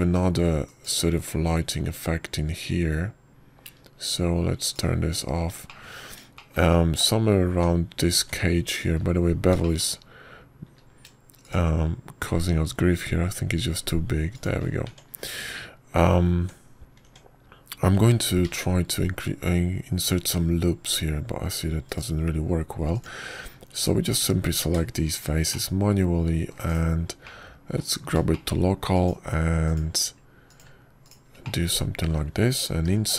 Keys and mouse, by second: 2.5 click, 3.4 middle click, 6.5 click, 6.6 middle click, 7.5 shift+middle click, 8.2 shift+middle click, 9.4 Tab, 10.1 Tab, 10.6 click, 12.5 q, 16.7 Tab, 18.2 Tab, 18.9 Tab, 20.3 ctrl+r, 24.8 click, 26.0 ctrl+click, 27.0 shift+click, 27.4 click, 27.4 right click, 27.8 middle click, 28.6 middle click, 28.6 /, 29.1 click, 29.1 right click, 29.6 middle click, 30.2 shift+middle click, 30.8 shift+click, 31.5 shift+click, 32.4 shift+click, 32.9 shift+click.